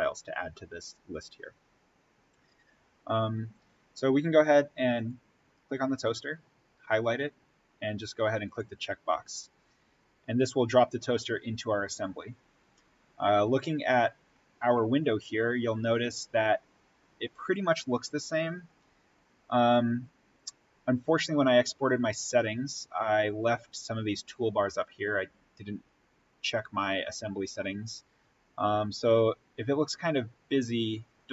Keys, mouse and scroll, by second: 4.8 click, 8.3 click.